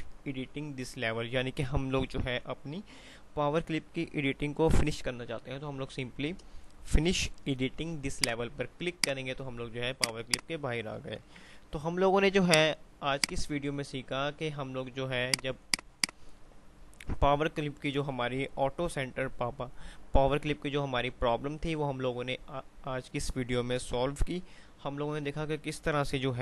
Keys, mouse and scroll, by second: 8.3 click, 11.7 ctrl+z, 11.8 F3, 12.6 click, 12.8 F2, 15.3 click.